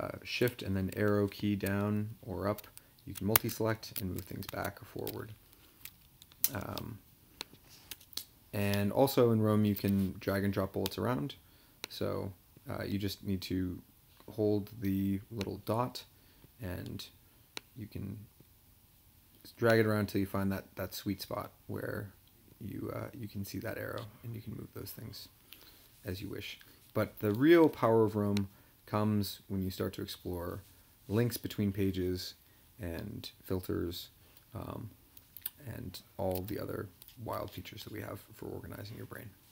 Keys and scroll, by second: 3.3 shift+Tab, 4.4 Tab, 5.8 Down, 6.3 Page_Up, 7.9 BackSpace.